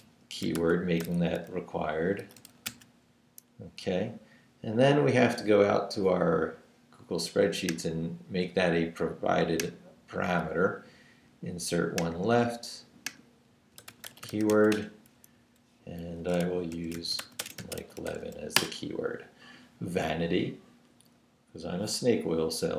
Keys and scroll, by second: 0.0-3.2 typing, 13.5-15.0 typing, 15.3 Down, 16.4 shift+Down, 16.5-18.7 typing.